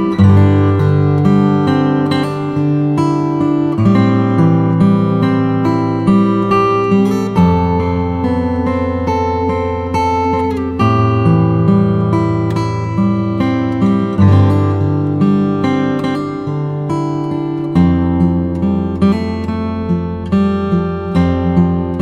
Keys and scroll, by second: 1.9 v, 16.3 alt+shift+Return, 16.8 shift+Return, 18.9 super+m.